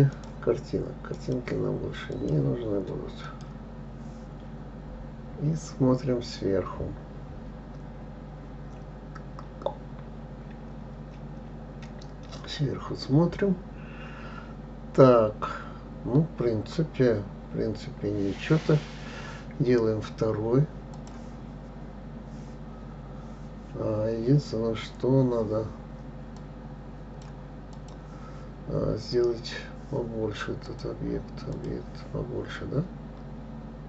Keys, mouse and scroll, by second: 1.6 click, 2.5 click, 3.6 click, 4.8-5.4 scroll down 4, 5.5 scroll down 1, 12.9 KP_7, 17.8-19.2 scroll down 2, 21.3-24.4 drag, 26.8-28.3 drag, 31.1-33.8 drag.